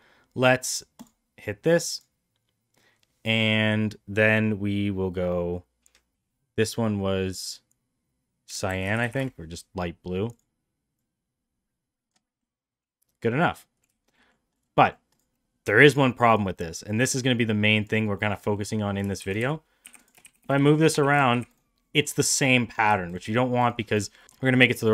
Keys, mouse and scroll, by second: 1.8 click, 1.9-9.9 drag, 10.3 click, 12.4-13.4 middle drag, 13.9 shift+middle drag, 14.2 middle drag, 14.5 click, 14.8 middle click, 15.1 click, 16.3 drag, 17.0 click, 18.2 middle drag, 18.5 middle click, 19.2 shift+d, 20.2 shift+d, 23.6 shift+click, 24.2 middle click, 24.6 middle drag.